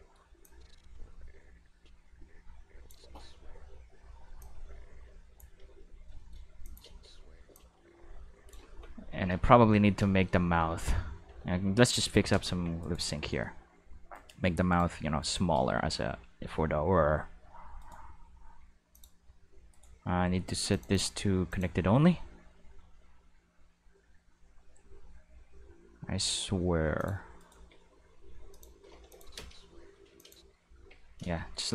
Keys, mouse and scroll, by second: 0.4-2.9 drag, 3.0 space, 3.5 space, 4.4-5.4 drag, 6.2 shift+middle drag, 6.6 click, 6.9 space, 7.5 space, 7.6-8.5 drag, 9.1 Tab, 9.8-12.5 typing, 10.1 shift+middle click, 11.5 Tab, 12.8 right click, 14.1 right click, 14.7 shift+right click, 15.2 shift+right click, 15.6 g, 17.2 middle click, 17.8 right click, 18.1-18.9 middle drag, 18.9 click, 19.4 g, 22.1 g, 27.0 click, 27.4 right click, 27.6 g, 28.5 click, 29.1 click, 29.4 space, 30.0 space, 30.2 click, 30.8 q, 31.4 shift+middle drag.